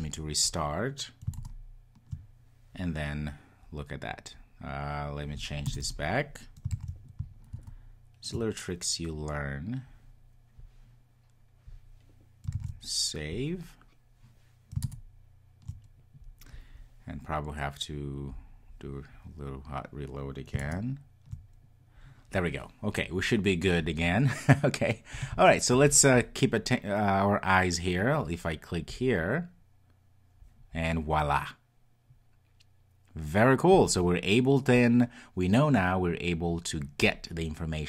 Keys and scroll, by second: 6.8 super+s, 12.6 super+s, 18.4 super+\.